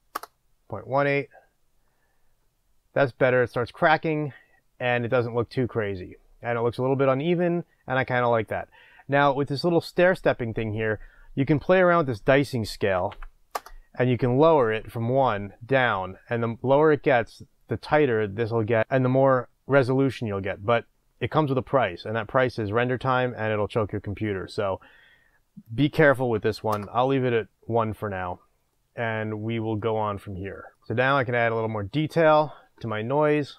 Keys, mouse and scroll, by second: 0.2 Return, 13.7 Return, 26.8 Return, 28.8-31.4 middle drag, 31.4-33.5 drag, 33.3-33.5 scroll up 2.